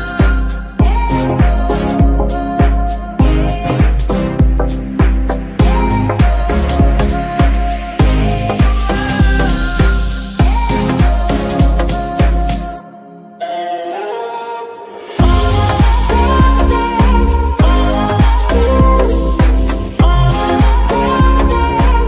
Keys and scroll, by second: 0.5 g, 1.3 Escape, 4.0 g, 4.4 Escape, 4.9 g, 5.4 Escape, 9.1 g, 9.5 Escape, 10.2 g, 10.7 Escape, 11.9 r, 12.8 Escape, 15.6 ctrl+Tab, 20.9 g.